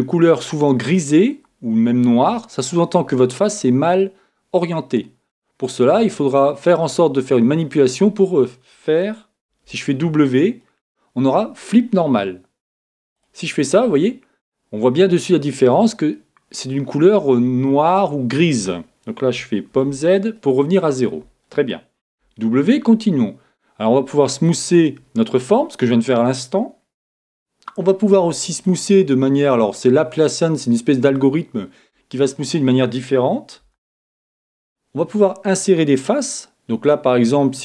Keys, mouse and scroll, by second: 2.7-5.7 middle drag, 2.7-4.0 scroll up 1, 5.7-6.3 scroll up 1, 6.3 middle click, 6.3-6.8 scroll down 1, 6.8-8.6 middle drag, 9.5 w, 13.9-15.8 middle drag, 15.8-16.1 scroll down 1, 16.1-18.0 middle drag, 19.7 super+z, 20.3-22.2 middle drag, 22.2 w, 25.4-27.3 middle drag, 27.1 w, 31.1-33.1 middle drag, 33.6 w.